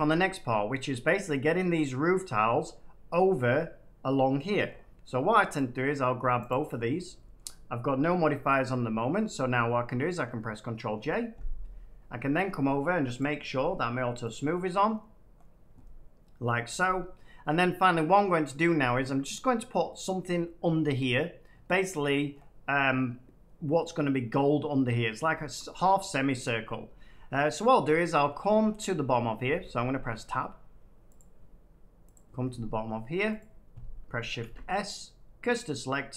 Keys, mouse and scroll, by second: 0.1 middle click, 4.6-5.4 scroll down 5, 5.5 click, 6.4 shift+click, 6.8-7.2 scroll down 3, 7.3 shift+scroll up 1, 8.3 middle click, 8.3 scroll down 1, 9.4-9.9 scroll up 1, 10.2 scroll up 1, 10.9 ctrl+j, 13.1 click, 14.3 click, 14.8 middle click, 14.8 middle click, 15.3 middle click, 15.3 middle click, 16.4 middle click, 18.2 middle click, 19.0 shift+middle click, 22.2-23.1 scroll, 25.2 middle click, 25.5 shift+middle click, 26.0 middle click, 28.4 middle click, 29.5 Tab, 31.1 click, 32.1 click, 33.3 click, 34.3 s, 35.5 click.